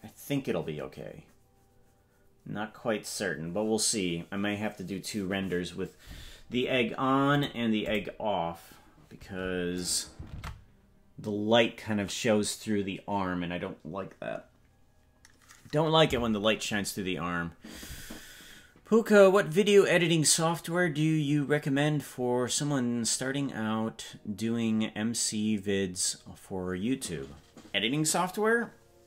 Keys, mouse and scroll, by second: 7.4 click, 8.0 click, 9.9 right click, 10.4 ctrl+Tab.